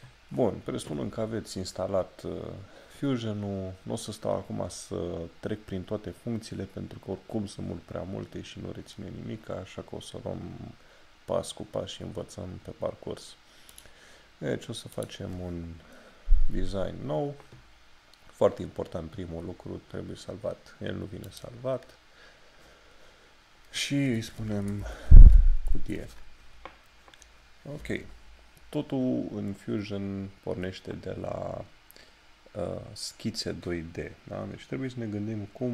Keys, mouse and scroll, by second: 13.7 click, 21.2 click, 24.4 shift+Num_Lock, 24.4 click, 28.0-28.7 scroll down 1, 30.9-33.1 scroll down 1.